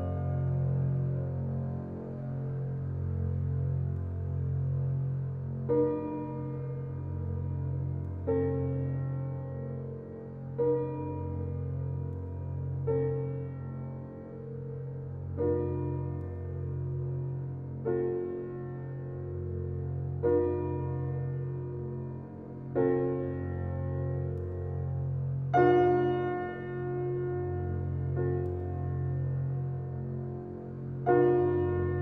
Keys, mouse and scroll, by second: 1.6 click, 2.2 alt+click, 2.9 alt+right click, 3.2 alt+click, 4.1 alt+right click, 4.4 alt+click, 7.9-10.5 alt+drag, 11.8-13.6 right drag, 13.6 click, 18.1 click, 19.2 right click, 20.3 click, 22.4 right click, 23.7 click, 26.7 click.